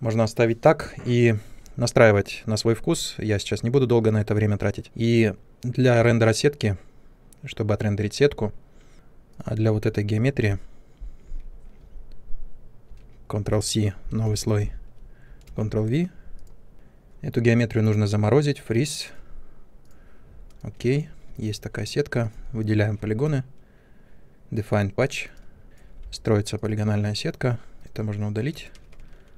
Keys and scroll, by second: 12.8 ctrl+c, 14.2 n, 15.4 ctrl+v, 25.9 3, 27.7 Delete, 28.8 ctrl+z.